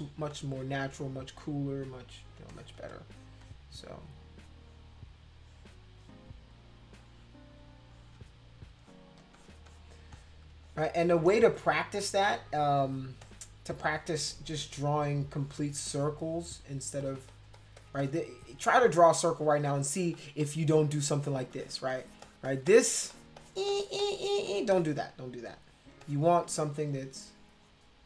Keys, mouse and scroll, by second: 0.3 click, 2.3 space, 2.5 click, 2.9 click, 3.4 click, 4.5 click, 5.4 click, 6.0 click, 6.9 click, 7.9 click, 8.8 click, 9.2 space, 9.3 click, 9.7 click, 10.1 click, 10.6 click, 12.6 space, 12.8 click, 13.2 click, 15.1-16.1 drag, 17.0 click, 17.3 click, 17.5 click, 17.8 click, 18.0 click, 19.3 click, 19.6 click, 19.8 click, 20.1 click, 20.4 click, 20.7 click, 20.9 click, 21.2 click, 21.5 click, 21.9 click, 22.2 click, 22.5 click, 22.6 click, 23.1 click, 23.3 click, 23.7 click, 24.0 click, 24.5 click, 24.7 click, 25.9 space, 26.0 click, 26.8 click.